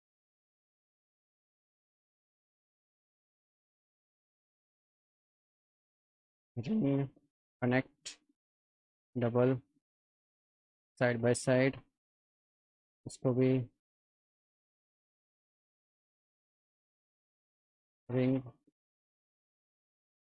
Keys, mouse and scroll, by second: 0.5 click, 1.5 alt+middle click, 2.6 click, 3.7 click, 4.1 alt+middle click, 5.0 click, 5.9 click, 7.3 click, 8.7 click, 9.8-11.4 drag, 11.8 alt+middle click, 12.8 click, 14.2 ctrl+z, 15.0 click, 16.5 click, 17.5 click.